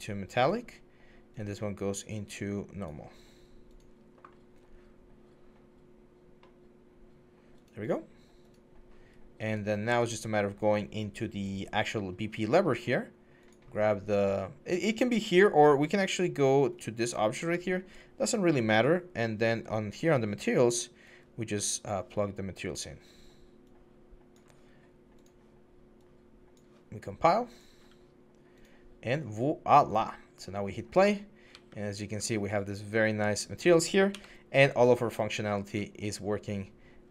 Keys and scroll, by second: 9.2 s, 31.3 typing, 33.9-37.1 typing.